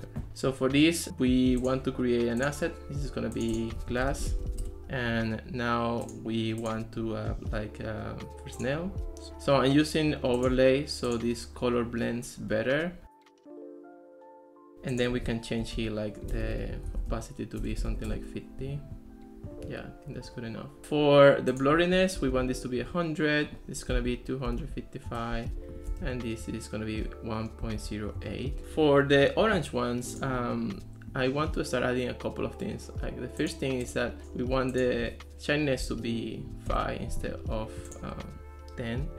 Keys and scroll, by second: 3.9-4.8 typing, 15.4-18.4 typing, 22.0-22.9 typing, 24.0 2, 24.5 5, 25.1 Return, 25.7-28.4 typing, 35.8 5, 36.7 Return.